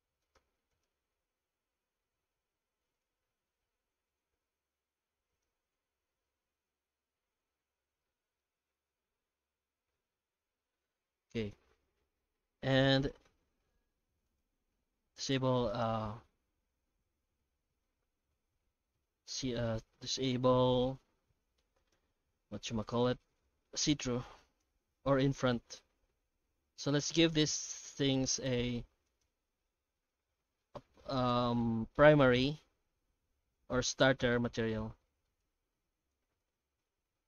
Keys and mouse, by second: 0.3 3, 0.7 alt+shift+right click, 1.1 alt+s, 3.4 Tab, 3.6 middle click, 4.2 Tab, 4.6 3, 5.3 right click, 5.7 alt+s, 7.5 Tab, 7.8 alt+middle click, 8.8 Tab, 9.2 alt+s, 10.6 Tab, 12.7 ctrl+shift+x, 15.1 alt+a, 15.7 right click, 17.6 h, 18.7 alt+h, 19.3 alt+a, 20.2-20.8 shift+middle drag, 21.8 right click, 23.0-23.8 middle drag, 24.0 z, 27.5 right click, 28.0 shift+right click, 28.5 middle drag, 29.1 shift+right click, 29.9 shift+g, 30.6-31.0 middle drag, 31.2 ctrl+space, 31.6-34.7 shift+middle drag, 35.9 z.